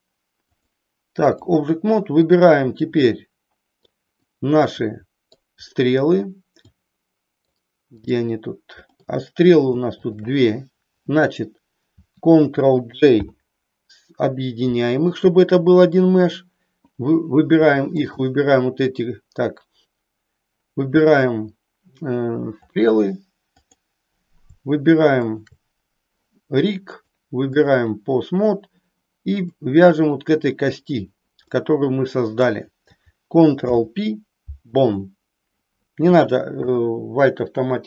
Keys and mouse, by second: 0.6 click, 4.3-5.4 middle drag, 6.6 middle click, 22.6 click, 23.6 click, 25.3 shift+click, 26.9 click, 29.3 click, 31.5-32.5 middle drag, 33.5 ctrl+p, 36.6 KP_1.